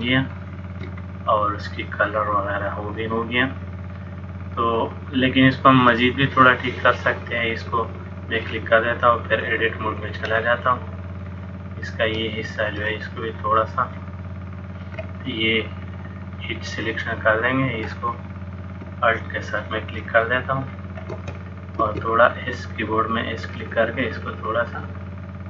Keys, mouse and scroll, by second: 0.4 shift+middle click, 1.1 middle click, 7.8 click, 9.4 click, 10.7 middle click, 13.9 alt+click, 16.0 click, 18.3 alt+click, 19.6 click, 20.7 alt+click, 21.9 s, 24.1 middle click.